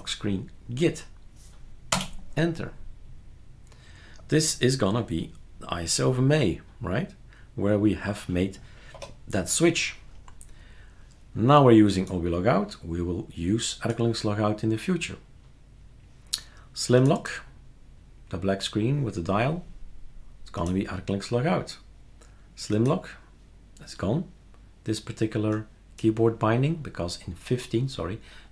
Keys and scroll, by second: 1.9 Return, 8.9 F12.